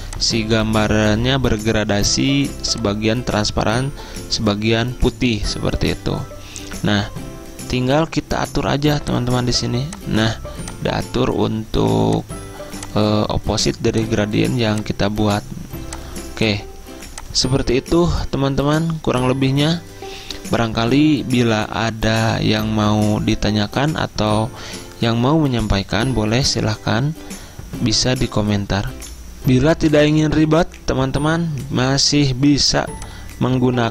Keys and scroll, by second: 29.0 F10.